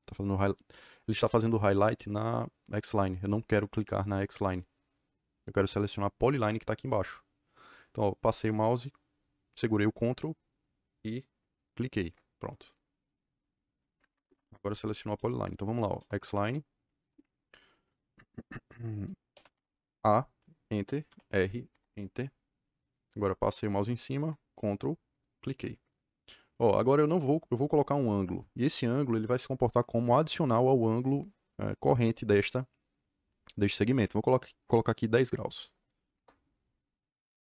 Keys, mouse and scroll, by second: 4.0 click, 6.1 Escape, 11.5 ctrl+click, 13.9 Escape, 14.0 Escape, 14.1 Escape, 14.3 Escape, 15.7-16.6 typing, 19.2 a, 19.4 Return, 21.0 r, 21.6 Return, 25.1 ctrl+click, 35.5 KP_1, 35.6 KP_0, 36.1 KP_Enter.